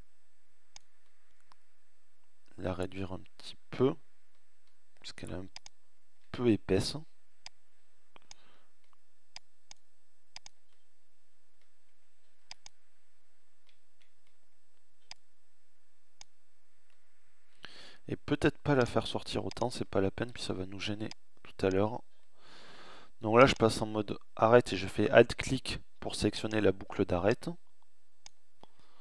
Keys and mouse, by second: 0.0 middle click, 0.5-1.5 middle drag, 1.9-3.3 middle drag, 9.3 middle click, 19.0 middle click, 21.2 middle click, 26.3 alt+click.